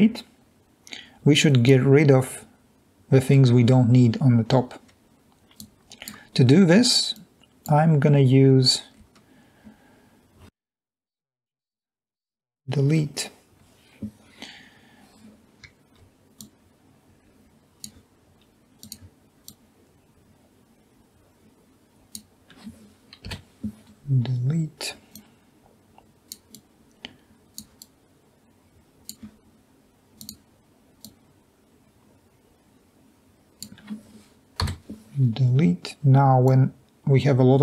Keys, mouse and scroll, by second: 13.2 Delete, 17.2 drag, 18.0-18.6 drag, 24.1 Delete, 25.9-26.5 drag, 27.3 drag, 35.5 Delete, 37.4-37.6 drag.